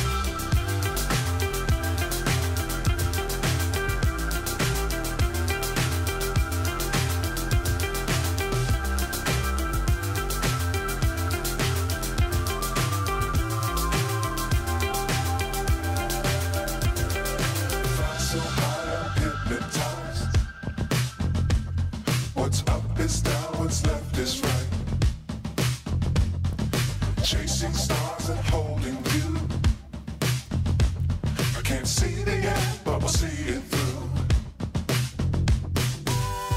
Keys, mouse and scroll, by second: 2.2 click, 2.9 Tab, 3.5-4.5 scroll up 2, 4.5 click, 5.1 click, 6.3 click, 8.6 click, 9.4 shift+click, 9.9 shift+click, 10.4 shift+click, 10.9 shift+click, 11.6 shift+click, 12.1 shift+click, 13.0 shift+click, 13.6 shift+click, 14.2 shift+click, 14.8 shift+click, 15.1 shift+click, 15.8 click, 17.0 shift+click, 17.4 shift+click, 17.6 shift+click, 17.9 shift+click, 18.4 shift+click, 18.7 shift+click, 19.1 shift+click, 19.4 shift+click, 20.0 click, 21.0 shift+click, 21.4 shift+click, 21.9 shift+click, 22.3 shift+click, 22.5 shift+click, 22.8 shift+click, 23.1 shift+click, 23.4 shift+click, 24.2 click, 25.9 shift+click, 26.4 shift+click, 26.8 shift+click, 27.1 shift+click, 27.4 shift+click, 29.3 click, 30.8 shift+click, 31.5 shift+click, 32.0 shift+click, 32.3 shift+click, 32.7 shift+click, 35.9 click.